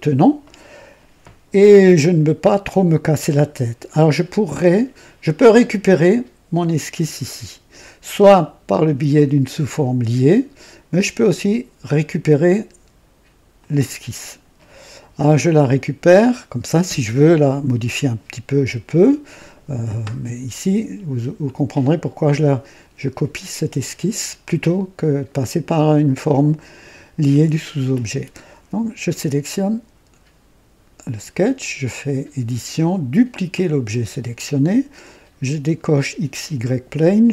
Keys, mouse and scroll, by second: 5.5 click, 13.5 click, 31.8 click, 33.4 click, 35.9 click.